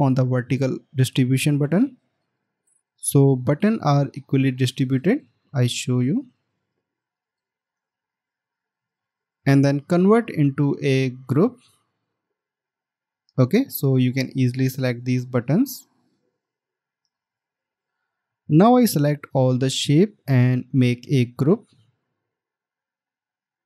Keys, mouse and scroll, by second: 5.9-7.2 alt+scroll down 1, 7.2 alt+click, 7.2 scroll down 1, 7.7 alt+scroll down 1, 8.3 space, 12.1 right click, 21.8 right click.